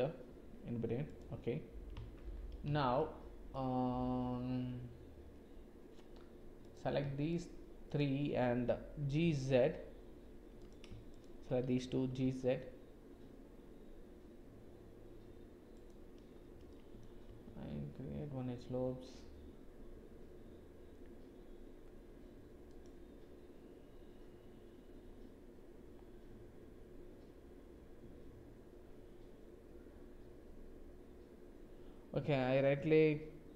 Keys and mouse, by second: 3.0 shift+click, 7.3 shift+click, 7.9 shift+click, 9.0 g, 11.1 shift+click, 12.0 g, 16.8 ctrl+click, 17.2 ctrl+r.